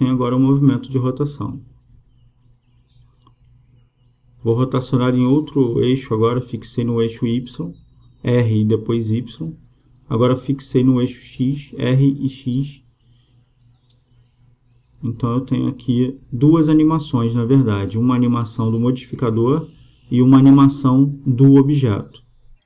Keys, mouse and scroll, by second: 2.5-4.2 drag, 8.0 r, 12.1 r, 15.7-17.3 drag, 18.7-20.5 drag, 20.9-22.6 drag.